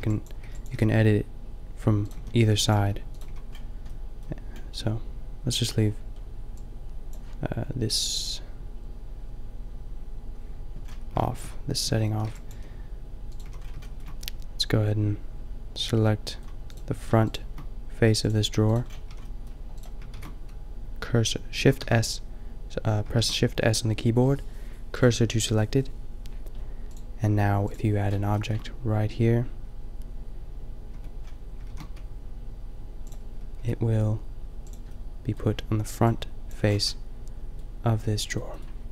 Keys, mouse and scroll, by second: 0.0-0.7 typing, 2.1 a, 2.4 b, 2.8 g, 3.3 a, 3.5-5.3 middle drag, 11.8-13.4 typing, 18.9 middle click, 19.2 middle click, 19.2 a, 20.2 shift+s, 21.8 shift+s, 23.1 shift+s, 24.8 middle click, 27.9-30.3 middle drag, 30.9 Tab, 31.7 shift+a, 33.6 s, 34.7-35.4 drag.